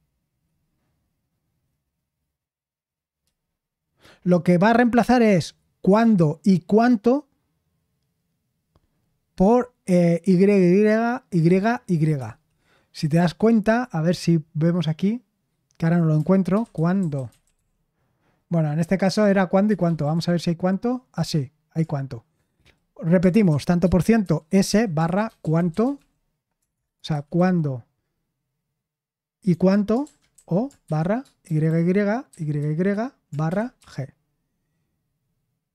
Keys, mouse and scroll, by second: 12.1 Escape, 16.2-18.0 typing, 19.6-20.6 typing, 21.1 Return, 23.9-27.8 typing, 29.5-34.2 typing.